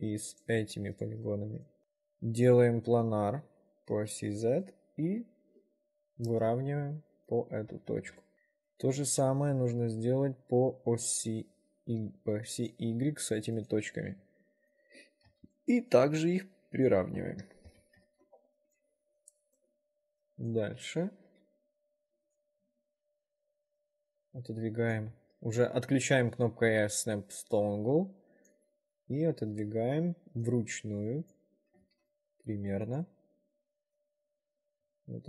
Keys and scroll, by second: 7.9 s, 15.4 s, 17.8 p, 18.2 ctrl+r, 21.4 w, 24.4 s, 28.6 s, 30.4 s, 34.5 ctrl+r.